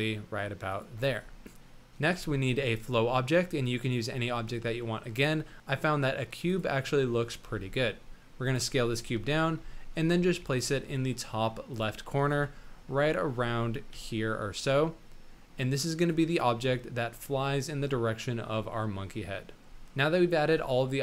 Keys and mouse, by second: 1.4 middle click, 2.0 shift+a, 7.4 s, 8.9 KP_1, 9.7 shift+drag, 10.2 s, 10.6 g, 12.3 KP_7, 13.0 shift+middle click, 13.9 g, 16.8 middle drag, 17.0 click, 18.7-19.7 drag, 19.7 a, 20.4 shift+click, 20.9-21.0 drag.